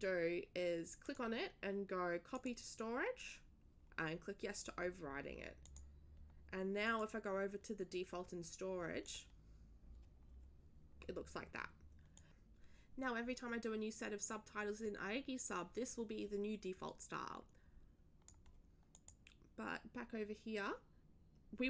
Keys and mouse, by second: 1.0 click, 2.3 click, 5.6 click, 6.8 click, 9.0 click, 12.1 click, 18.9 click, 19.2 click.